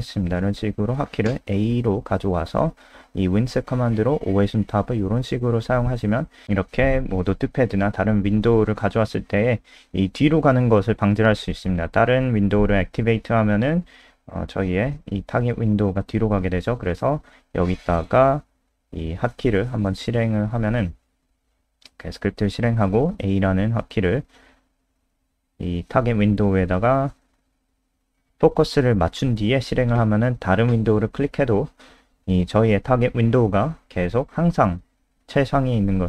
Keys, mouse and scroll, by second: 0.4-1.5 typing, 3.3 click, 21.8 F5, 23.3 click, 27.0 a, 31.1 click.